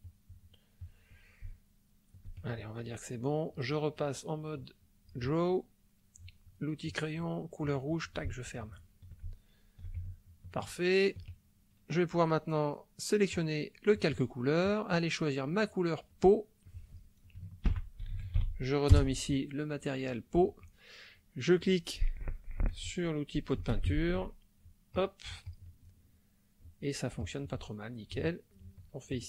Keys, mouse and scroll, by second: 0.8 click, 1.6 ctrl+middle click, 3.9-5.3 drag, 7.7 click, 8.4 ctrl+middle click, 9.4 ctrl+middle click, 10.0 ctrl+shift+middle click, 10.7 shift+middle click, 13.3 click, 14.6 click, 15.6 click, 16.1 click, 16.7 click, 17.7 shift+p, 18.1 shift+e, 18.2 shift+a, 18.4 shift+u, 19.0 Return, 23.8 shift+space, 24.9 click, 25.5 click, 27.2 click, 28.4 shift+middle click, 29.1 shift+click.